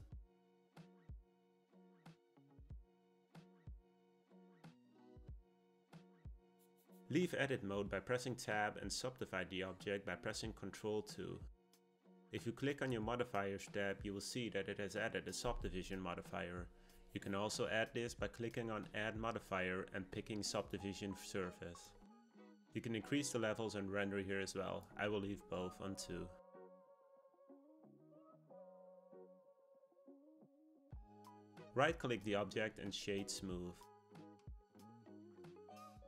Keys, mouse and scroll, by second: 7.5 Tab, 11.0 ctrl+2, 15.6 click, 19.5-22.3 drag, 25.1-29.2 drag, 30.0 click, 31.8-36.0 right drag.